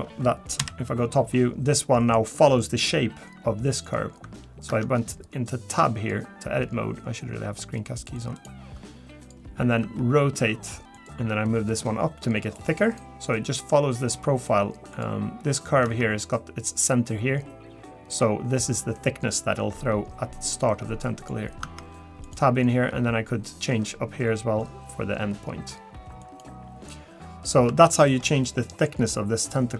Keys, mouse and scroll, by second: 9.2 click, 9.8 r, 11.1 g, 14.9 click, 15.8 Tab, 21.2 click, 21.6 Tab, 22.2 click, 22.9 g, 27.9 shift+middle click, 28.4 middle click, 29.1-29.6 scroll up 5, 29.6 scroll down 2.